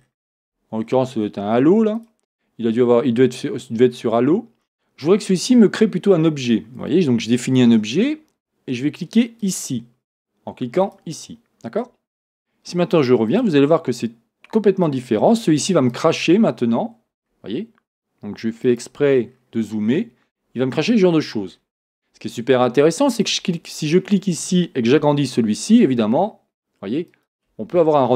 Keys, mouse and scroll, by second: 2.0-9.6 drag, 13.3-16.1 drag, 16.3 scroll up 1, 18.7 click, 19.3 scroll up 1, 21.1 scroll down 1, 23.1 click, 25.2 s, 27.3 click.